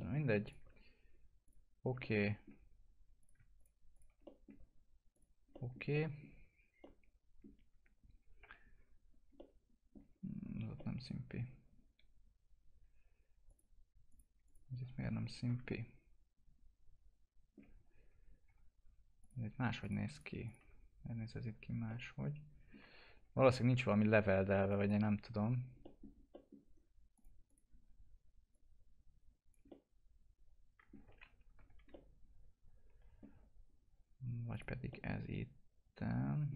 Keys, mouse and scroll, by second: 0.4 ctrl+click, 2.0 alt+middle click, 3.2 click, 4.2 alt+middle click, 5.1 click, 5.5 alt+middle click, 5.9 middle click, 6.8 alt+middle click, 8.4 F4, 8.9-9.2 scroll down 1, 9.3 alt+middle click, 10.3-10.6 scroll up 1, 10.6 F4, 10.7 middle click, 13.4 click, 15.0 F4, 15.4 scroll down 1, 15.6-18.1 alt+middle drag, 18.1 scroll up 1, 18.4 F4, 19.2 click, 19.8 ctrl+click, 21.8 alt+middle click, 23.0 1, 23.7-24.4 scroll up 1, 24.6 click, 25.8 middle click, 27.1 click, 27.7-28.5 scroll down 1, 28.5 click, 29.6-31.2 alt+middle drag, 31.2 ctrl+z, 31.9-34.5 alt+middle drag, 34.5 click, 34.9-36.5 alt+middle drag.